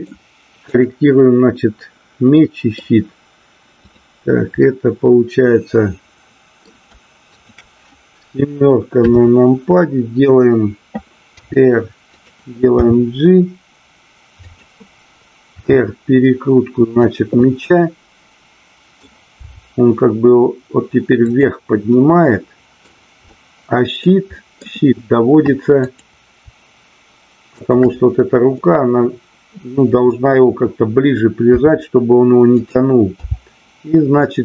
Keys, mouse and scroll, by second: 0.7-1.2 drag, 2.3-2.8 middle drag, 4.6-6.7 middle drag, 7.3 shift+click, 9.0 KP_7, 11.3 r, 12.2 click, 12.8 g, 14.5 click, 15.5 r, 17.1 click, 17.4-19.0 middle drag, 21.3 click, 21.9-22.8 middle drag, 23.3-24.1 middle drag, 24.4 middle click, 25.8-26.7 drag, 27.5-28.6 shift+drag, 28.6-30.4 middle drag, 31.5 r, 32.5 click, 33.3 g.